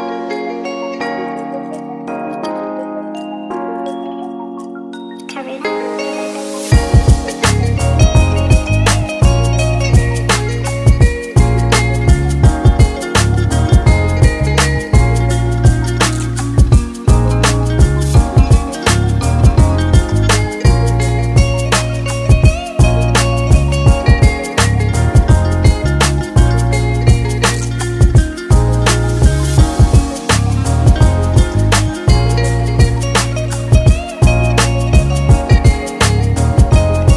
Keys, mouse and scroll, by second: 0.1 click, 2.4 s, 3.9 click, 5.4 s, 7.1 click, 9.2 r, 11.0 click, 13.1 s, 15.5 r, 17.7 click, 19.7 middle click, 21.3-21.7 scroll down 1, 21.9-22.5 scroll down 2, 22.5 scroll up 1, 22.5 scroll down 1, 23.7 KP_1, 24.2 scroll up 3, 24.9 shift+a, 27.4 click, 29.9 Tab, 30.6 e, 32.8 s, 33.8 click, 34.4 s, 36.9 z.